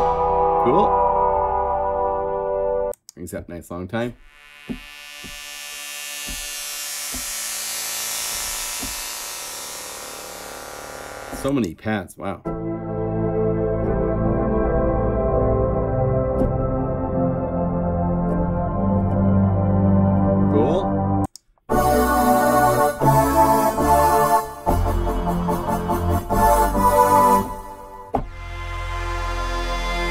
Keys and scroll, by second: 13.8 F4, 24.6 F1, 24.6 F2, 24.6 F4, 24.8 F4, 25.0 F4, 25.5 F4, 28.1 F1, 30.0 F2.